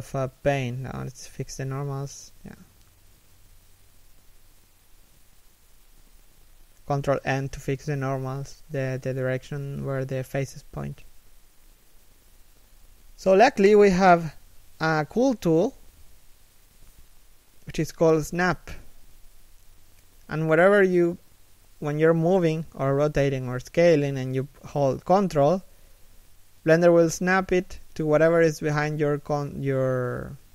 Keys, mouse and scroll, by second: 1.9 ctrl+n, 10.1 right click, 10.4 middle click, 12.3 g, 19.7 middle click, 20.2 scroll up 1, 20.5 scroll down 1, 20.6 middle click, 23.2 g.